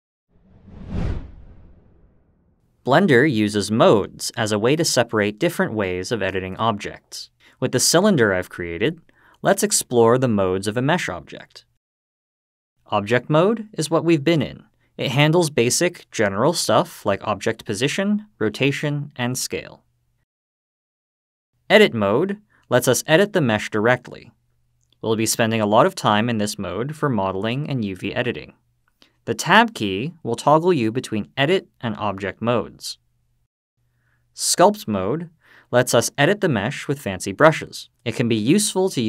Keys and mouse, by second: 20.5-21.3 drag, 32.3 Tab, 33.2 Tab, 33.6-34.4 drag.